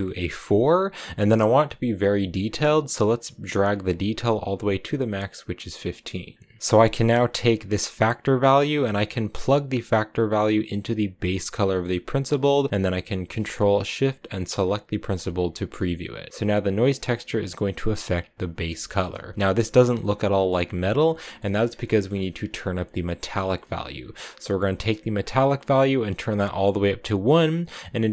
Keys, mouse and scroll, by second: 1.0-1.5 scroll up 2, 1.1 middle click, 3.4-11.3 drag, 11.4-14.2 middle drag, 14.5 ctrl+shift+click, 15.2 click, 15.8-16.3 scroll down 1, 18.6 shift+middle click, 19.3 scroll up 1, 20.9-21.6 scroll up 5, 21.0 middle click, 21.6-24.8 middle drag, 25.0-28.0 drag.